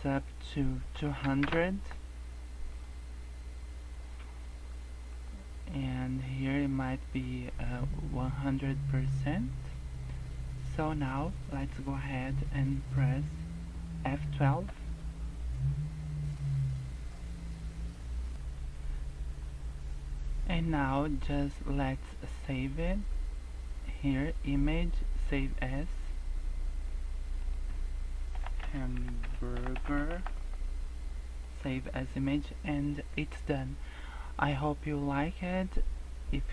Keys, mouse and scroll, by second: 1.4 KP_0, 4.1 scroll up 2, 5.2 click, 10.0-10.4 scroll down 2, 10.2-10.6 scroll up 3.